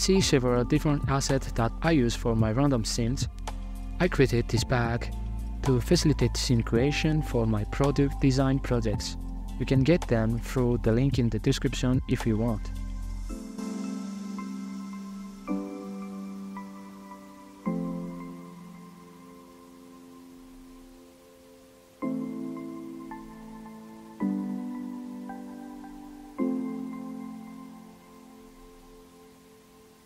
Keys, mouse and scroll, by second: 0.0-6.5 typing, 0.0 middle click, 0.0 scroll up 1, 0.7 middle drag, 1.6 Tab, 1.7 scroll down 2, 2.4 Tab, 2.5 middle click, 2.5 scroll up 5, 2.8 middle click, 3.2 middle click, 3.3 scroll up 1, 3.4 middle drag, 4.6 scroll down 2, 4.6 middle click, 4.8 scroll up 3, 5.0 Right, 5.4 middle click, 6.0 middle click, 6.2 scroll up 3, 6.3 shift+middle click, 6.5 right click, 7.5 scroll down 3, 7.7 a, 7.8 middle click, 8.3 click, 9.3 click, 10.1 scroll down 2, 10.5 z, 11.0 scroll up 3, 12.6 click, 13.4-14.0 shift+middle drag, 15.2 KP_0, 15.7 click, 15.8-16.3 scroll down 23, 16.3-16.8 shift+middle drag, 16.8 z, 17.0 KP_0, 17.2 z, 17.7 Left, 18.6 click, 19.2 click, 19.5 scroll down 2, 19.6 scroll up 3, 20.0 click, 20.0 scroll down 2, 20.1 scroll up 2, 20.5 g, 20.8-21.4 scroll up 5, 21.1 click, 21.2 middle click, 21.4 click, 22.0 shift+a, 22.5 shift+d, 22.9 ctrl+z, 23.1 g, 24.1 2, 24.4 ctrl+z, 26.1 click, 26.8 ctrl+z, 27.0 ctrl+z, 28.3 F2, 29.5 click.